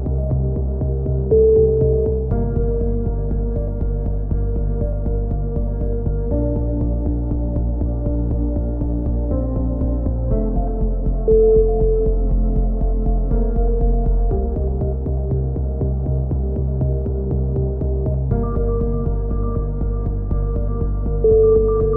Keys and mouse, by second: 0.4 k, 3.0 a, 3.7 z, 5.6 z, 6.0-7.2 middle drag, 9.3 right click, 11.3 right click, 14.3 right click, 15.8-16.8 right drag, 16.8-18.1 middle drag, 18.1 click, 18.6 right click, 18.6 a, 19.0 right click, 19.8 click, 20.3-21.9 typing.